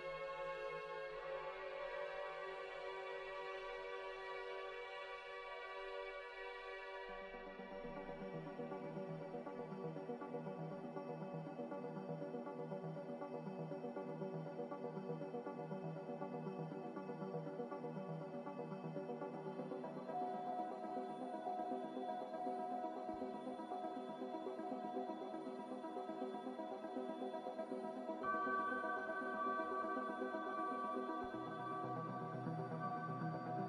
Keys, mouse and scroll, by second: 9.6 z, 20.8-21.7 typing, 25.2 a, 32.1 typing, 32.2 Return.